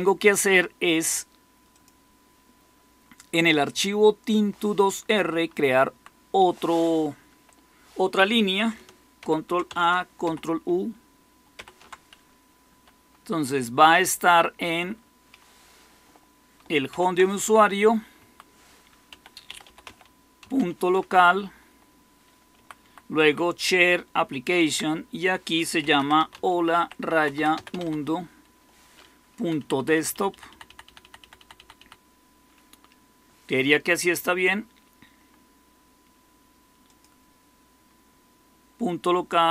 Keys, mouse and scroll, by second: 5.8 Down, 7.2 Up, 9.1 ctrl+k, 10.2 ctrl+u, 11.5 ctrl+u, 12.6 Up, 13.2 Right, 13.7 Right, 13.8-14.5 Right, 16.8 ≃, 18.1 Right, 18.1-21.0 typing, 21.2 Delete, 21.4 Delete, 21.6 Delete, 22.5 Right, 22.7 Right, 23.1 Right, 23.4 Right, 23.9 Right, 24.0 Right, 24.2-24.6 Right, 25.5-28.2 typing, 29.3 Delete, 29.5 Delete, 29.7 Delete, 29.9 Delete, 30.0 Delete, 30.4 Delete, 30.6 Delete, 30.9 Delete, 31.1 Delete, 31.7 Delete.